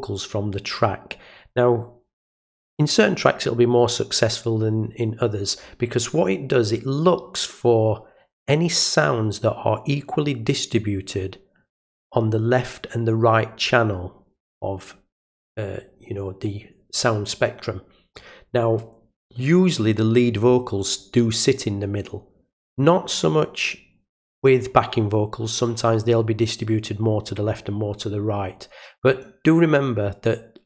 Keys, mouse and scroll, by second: 18.1-19.2 drag, 29.2-30.6 drag.